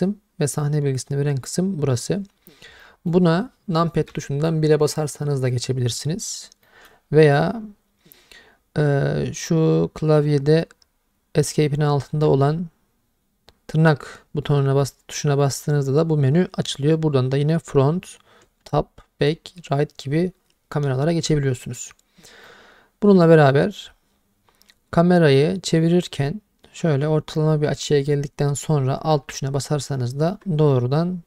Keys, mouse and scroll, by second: 2.8 middle drag, 4.1 KP_1, 6.6 middle drag, 18.6 `, 22.4-30.3 middle drag.